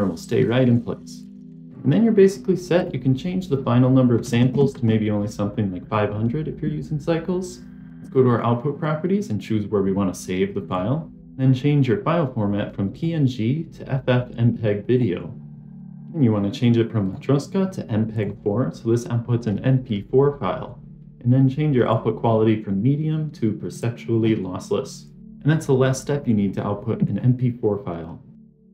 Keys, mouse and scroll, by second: 1.4 click, 2.7-5.7 drag, 4.4 KP_0, 7.9 click, 10.6 click, 12.8-15.1 drag, 16.9-18.1 drag, 20.1-21.7 scroll down 2, 21.7-23.7 drag, 24.6 scroll down 3, 25.2 click, 26.4 scroll up 1, 27.0 scroll up 1, 28.5 scroll down 1.